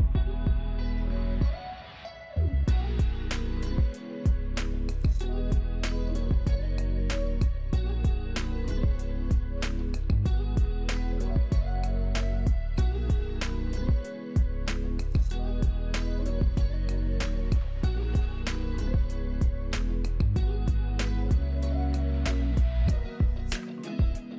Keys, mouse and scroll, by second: 4.5-5.8 typing, 6.0-6.5 scroll down 2, 10.4-10.9 scroll up 2, 11.0 alt+middle click, 14.5 F2, 15.4 F3, 16.4 F3, 20.3 shift+7, 21.8 Escape, 22.4 middle click, 23.2 ctrl+z.